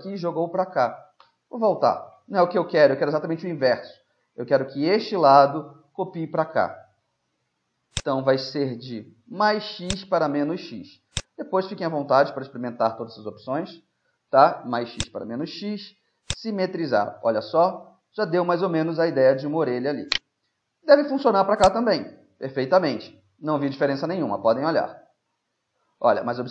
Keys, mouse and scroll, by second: 1.3 ctrl+z, 1.8-4.4 middle drag, 8.0-9.9 drag, 11.2-13.0 drag, 16.3-18.3 drag, 16.8-18.8 middle drag, 20.1-22.1 right drag, 21.7-23.5 drag, 23.5-26.5 middle drag, 24.1 z.